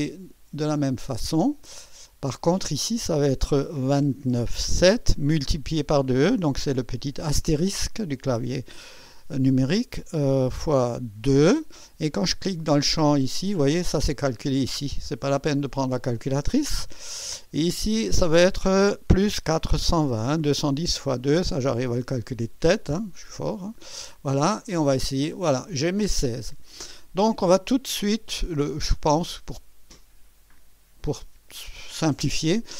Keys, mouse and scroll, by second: 0.8 click, 2.5 click, 4.1 KP_2, 4.4 KP_9, 4.8 KP_7, 7.3 KP_Multiply, 11.2 KP_2, 13.2 click, 17.3 click, 19.6 KP_4, 20.0 KP_2, 20.8 0, 24.4 click, 30.5 click.